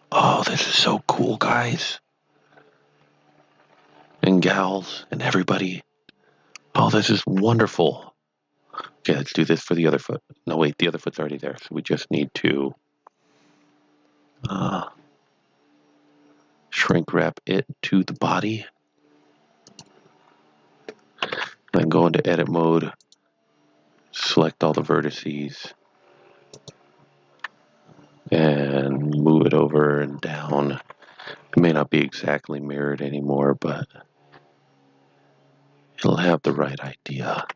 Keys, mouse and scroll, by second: 0.6 click, 1.4 KP_1, 6.0 middle click, 7.1-7.6 scroll down 1, 7.6 Tab, 9.3 click, 11.9 click, 12.0 click, 16.7 click, 21.2 KP_1, 21.6 Tab, 22.5 g, 23.0 right click, 24.1-25.3 typing, 26.5 right click, 27.5 g, 30.1 click, 30.8 KP_3, 32.0 scroll up 1, 32.9 g, 36.6 click, 37.4 KP_7.